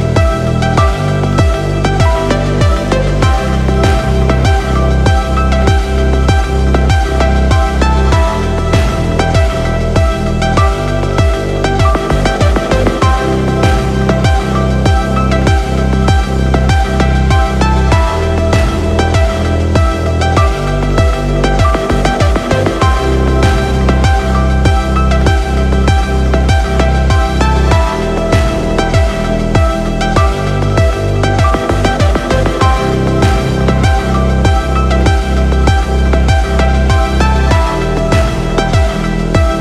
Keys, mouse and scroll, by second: 0.3 space, 1.1 space, 1.2 space, 1.8 space, 3.7-4.4 scroll down 1, 4.7-5.1 scroll up 3, 4.8 shift+middle drag, 5.1 scroll down 1, 5.2-5.6 shift+middle drag, 6.8 click, 8.4-11.1 drag, 19.8-20.9 drag, 21.9 n, 22.9 click, 23.4-24.0 scroll down 3, 24.0-24.4 middle drag, 24.7 scroll down 1, 24.9 click, 25.8 n, 26.9-27.9 drag, 28.8-29.9 middle drag, 32.1 ctrl+alt+KP_0, 35.6 click, 35.9-36.7 scroll down 2, 36.7 click, 36.8-37.2 scroll down 5, 37.2 click, 37.6 click, 38.2 click, 38.8 click, 39.3 click.